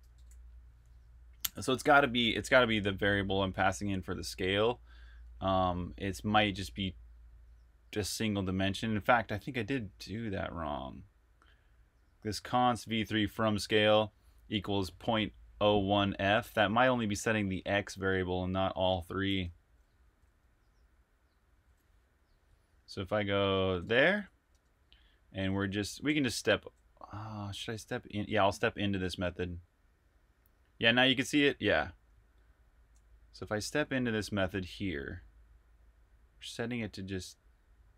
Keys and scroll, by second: 0.0-2.3 typing, 2.8 super+Tab, 19.6-20.6 typing, 23.7 super+Tab.